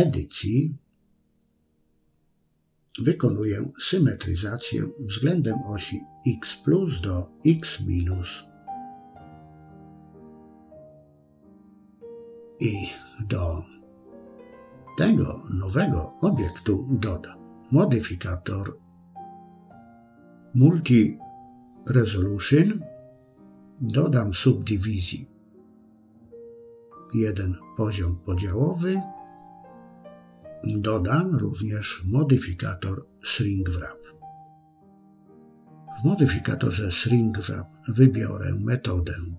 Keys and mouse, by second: 1.4 a, 3.5-6.6 drag, 8.8 Tab, 11.3-14.0 middle drag, 14.6 KP_1, 16.8-22.2 drag, 24.0 click, 31.0-34.4 drag, 37.9-39.3 drag.